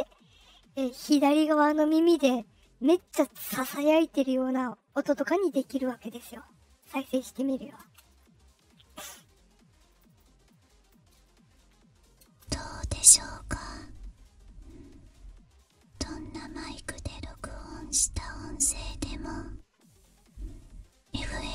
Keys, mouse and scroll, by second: 7.8 space, 9.8 click, 10.0 click, 10.4 click, 12.2 space, 12.6-17.3 drag, 17.9 click, 20.0-21.5 drag.